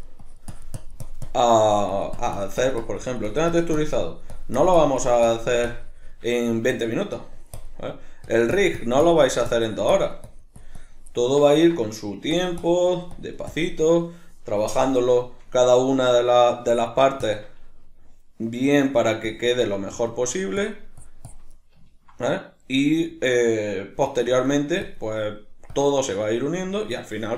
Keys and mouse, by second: 6.3-7.2 shift+middle drag, 7.2-7.8 drag, 7.8-8.3 middle drag, 8.3-11.1 drag, 11.1-12.4 middle drag, 12.4-15.2 drag, 15.2-16.7 shift+middle drag, 16.7-18.2 drag, 18.2-19.3 middle drag, 19.3-19.6 drag, 19.6-20.6 middle drag, 20.6-21.6 drag, 21.6-24.3 ctrl+middle drag, 24.3-25.2 drag, 25.2-25.7 middle drag, 25.7-26.2 drag, 26.2-27.3 middle drag.